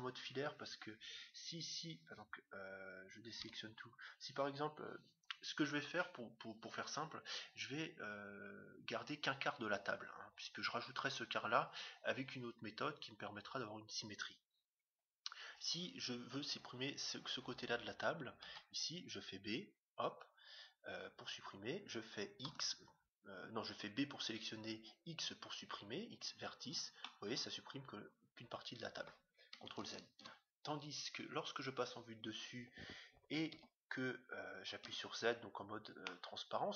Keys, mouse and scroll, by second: 3.4 a, 18.4 b, 22.4 x, 26.9-28.7 middle drag, 29.8 ctrl+z, 31.0 KP_7, 33.5 a, 34.8 z, 36.0-36.7 middle drag.